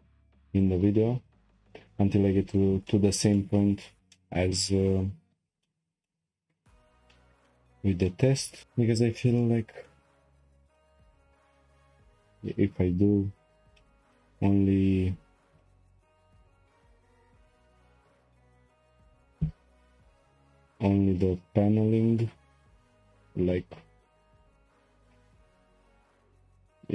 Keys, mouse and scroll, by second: 0.6 click, 1.6 ctrl+click, 2.5 shift+click, 2.9-4.5 middle drag, 4.5-5.2 scroll down 1, 5.2-5.6 scroll down 1, 5.6-6.7 shift+middle drag, 6.7-7.1 scroll up 3, 7.1-9.3 shift+middle drag, 9.3 scroll up 3, 9.4-10.4 shift+middle drag, 10.4-11.1 scroll up 3, 10.7-11.1 shift+middle drag, 11.1 middle click, 11.5-11.9 scroll down 1, 11.9-12.5 scroll up 1, 12.5-13.8 scroll up 1, 13.8-15.5 shift+middle drag, 15.5 k, 24.3 k.